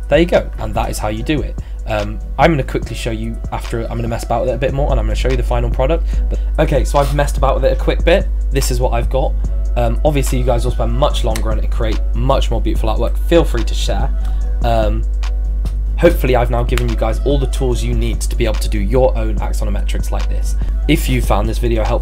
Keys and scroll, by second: 6.3 z.